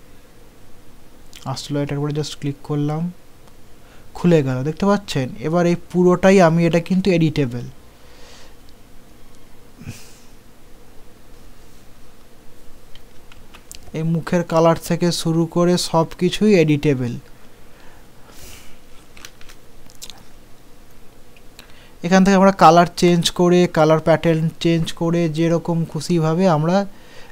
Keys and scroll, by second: 6.8 ctrl+z, 13.4 ctrl+z, 19.2 ctrl+g.